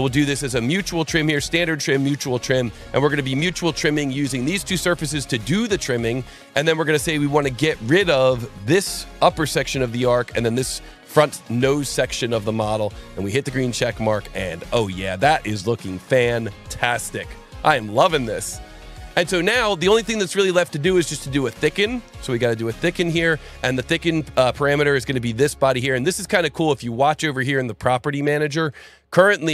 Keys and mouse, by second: 6.5 click, 9.0 click, 10.3 click, 12.9 click, 20.3 click, 21.8 click, 23.8 click, 26.0 alt+1, 27.0 click, 28.5 alt+1.